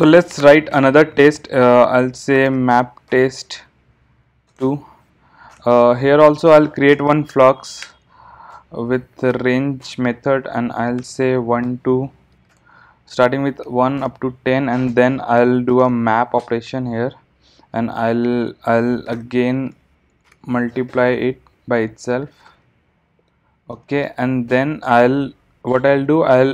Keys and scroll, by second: 0.5 super+n, 8.0 Return, 16.4 Return.